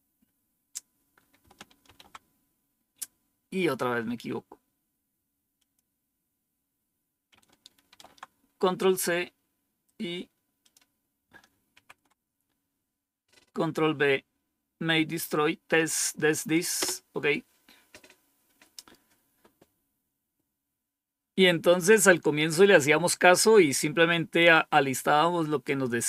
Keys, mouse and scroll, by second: 1.7 ctrl+c, 5.5 click, 7.8 ctrl+c, 10.5 click, 11.6 ctrl+shift+v, 16.7 Return.